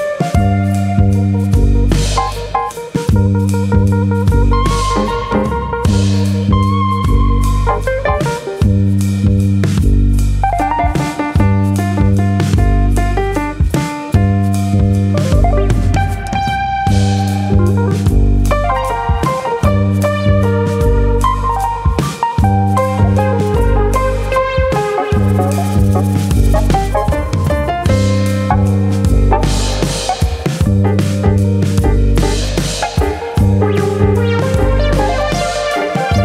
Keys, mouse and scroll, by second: 0.0 middle click, 0.6 ctrl+click, 1.3 ctrl+e, 2.1 middle click, 2.4 shift+middle click, 2.7 scroll up 2, 3.0 middle click, 3.3-3.9 scroll up 2, 3.5 middle click, 3.9 shift+middle click, 4.2 middle click, 4.9 shift+middle click, 5.2 middle click, 5.8 middle click, 6.0 shift+middle click, 6.7 shift+middle click, 7.3 middle click, 7.3 shift+middle click, 7.9 middle click, 11.3 alt+click, 11.6 middle click, 12.4 click, 12.7 middle click, 13.3 ctrl+click, 14.3 ctrl+e, 15.5-16.7 scroll down 8, 16.4 middle click, 16.7-17.7 scroll up 6, 17.0 shift+middle click, 17.5 middle click, 17.8 shift+middle click, 18.0-18.5 scroll up 1, 19.4 middle click, 19.9 shift+middle click, 20.6 alt+click, 20.8 middle click, 21.2 shift+middle click, 21.5 middle click, 21.8 shift+middle click, 22.9 middle click, 23.3 shift+middle click, 24.9 ctrl+r, 26.7 right click, 27.2 alt+click, 27.5 middle click, 27.7 middle click, 27.8 middle click, 28.7 g, 30.3 click, 30.7 alt+click, 31.0 middle click, 31.3 shift+middle click, 32.3 g, 33.7 click, 34.3 shift+middle click, 34.7 middle click, 35.1 middle click, 35.1 shift+middle click, 35.8 alt+click.